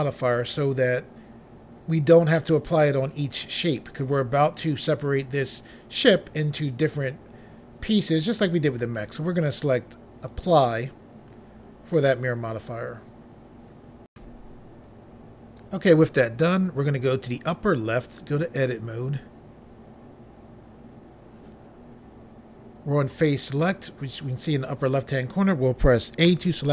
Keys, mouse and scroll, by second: 10.2 click, 14.1 Pause, 17.9 click, 18.6 click, 26.2 a.